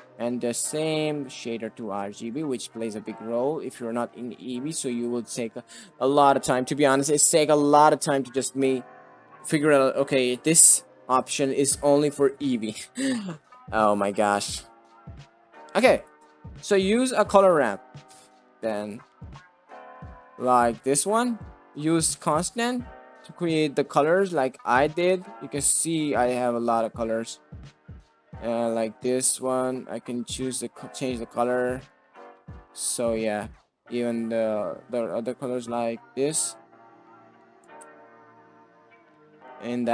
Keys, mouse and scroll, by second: 0.0 ctrl+space, 0.1 middle click, 0.7 middle click, 1.6 click, 3.2 middle click, 4.5 middle click, 4.6 click, 16.4 middle click, 19.0 click, 19.5 click, 20.2 click, 21.5 click, 22.1 click, 24.0 middle click, 24.5 middle click, 25.7-27.5 drag, 27.7 click, 30.6-31.7 middle drag, 32.1 ctrl+z, 33.6 click, 34.3 click, 35.3 middle click, 35.8 click, 37.9 ctrl+z, 38.2 drag, 38.8 drag, 39.5 click.